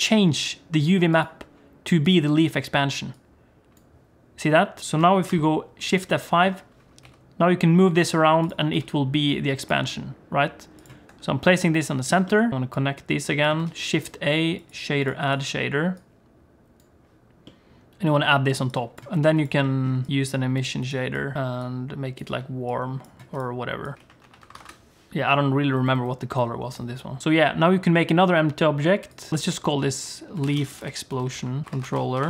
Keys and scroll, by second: 5.3 shift+F5, 7.0 g, 8.7 s, 9.8 g, 11.0 Tab, 12.5 ctrl+shift+F5, 13.7 shift+a, 19.1 g, 20.1 g, 20.1 shift+a, 21.3 shift+a, 24.5 0, 26.7 0, 27.2 shift+a, 29.3 shift+BackSpace.